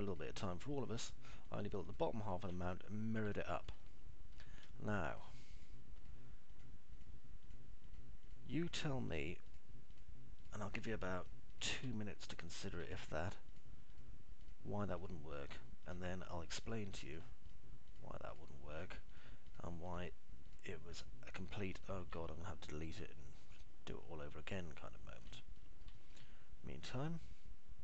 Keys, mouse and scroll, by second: 0.5 click, 2.0 click, 2.4 click, 2.9 ctrl+click, 3.4 alt+middle click, 4.0 middle click, 4.4 alt+middle click, 8.0 ctrl+click, 8.4 ctrl+click, 8.9 ctrl+click, 9.5 ctrl+click, 10.0 ctrl+click, 12.5 alt+middle click, 15.0 ctrl+click, 16.4 ctrl+click, 16.9 ctrl+click, 17.2 ctrl+click, 17.5 ctrl+click, 18.0 ctrl+click, 18.4 ctrl+click, 20.0 ctrl+click, 20.4 ctrl+click, 21.0 ctrl+click, 22.9-25.9 alt+middle drag, 26.2 middle click, 26.5 alt+middle click.